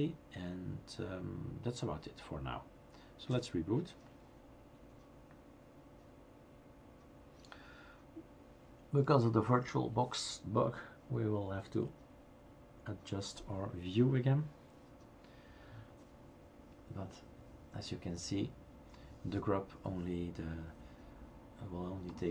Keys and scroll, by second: 4.3 r.